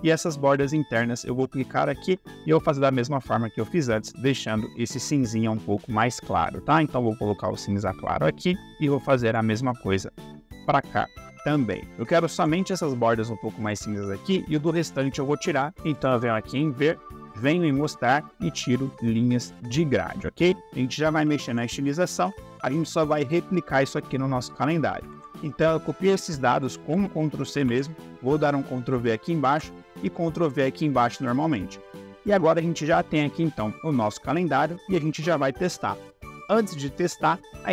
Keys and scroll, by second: 25.0 ctrl+c, 27.6 ctrl+v, 29.4 ctrl+v.